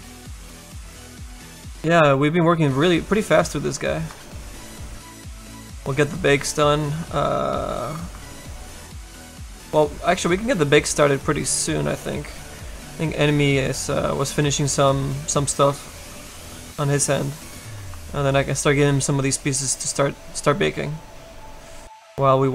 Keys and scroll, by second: 13.1 s, 20.7 s.